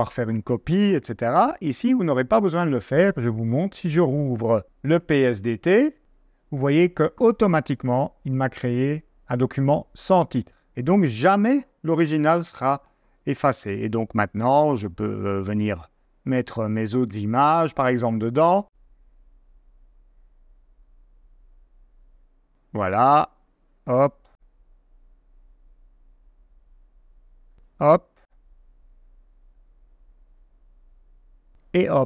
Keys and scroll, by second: 13.5 super+Tab, 22.1 super+Tab, 27.2 super+Tab.